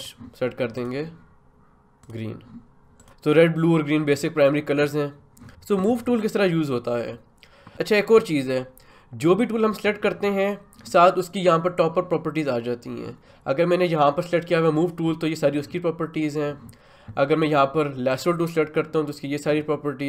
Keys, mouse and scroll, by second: 14.8 click, 18.1 click.